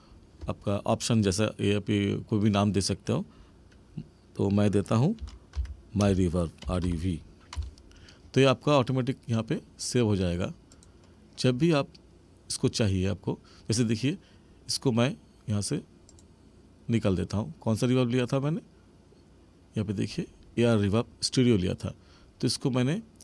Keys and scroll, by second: 6.0 space.